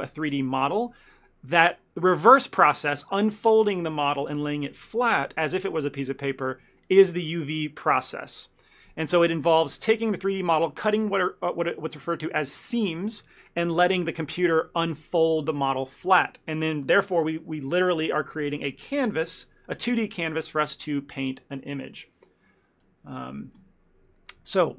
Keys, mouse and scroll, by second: 9.7 ctrl+middle click, 10.1 shift+middle click, 10.4 middle click, 24.3 middle click, 24.6 ctrl+middle click.